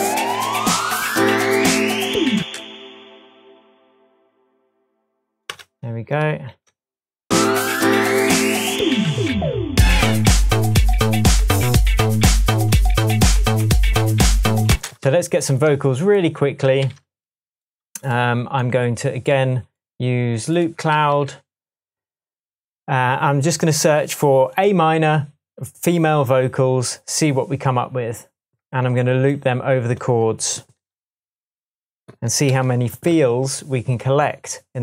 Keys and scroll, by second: 2.4 space, 5.5 BackSpace, 6.5 BackSpace, 14.7 space, 16.8 super+s, 20.9 Down, 32.5 super+l.